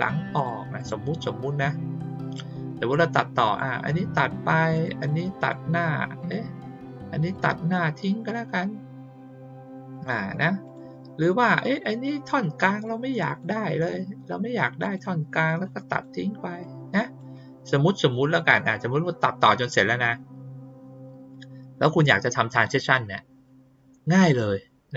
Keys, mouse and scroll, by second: 0.3 click, 0.7 click, 2.2 click, 3.4 click, 4.7 click, 5.3 click, 7.3 click, 9.8 click, 10.6 click, 11.7 click, 12.4 click, 13.2 click, 14.8 click, 15.9 click, 16.6 click.